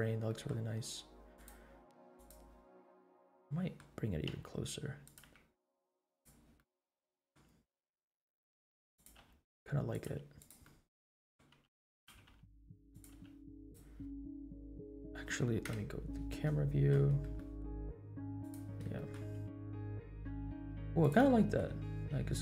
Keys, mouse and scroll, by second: 0.3 middle click, 1.3 click, 2.1 click, 2.9 middle click, 4.2 g, 5.2 r, 6.5 middle click, 8.0 r, 9.2 r, 10.2 g, 10.6 middle click, 11.6 g, 12.1 r, 13.2 r, 15.6 KP_0, 16.6-17.2 scroll down 3, 17.3-17.6 shift+middle drag, 18.4 click, 18.7 scroll up 1, 19.0 shift+middle click, 19.3 g, 21.4 shift+middle drag, 21.9 scroll up 1.